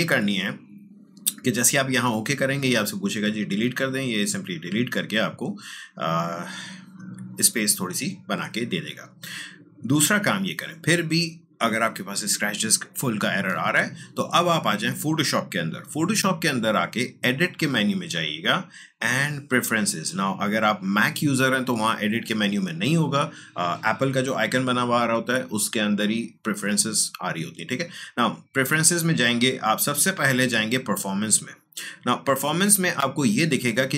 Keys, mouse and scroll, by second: 2.6 click, 8.9 click, 17.1 click, 17.1 click, 30.8 click, 33.2-33.9 drag.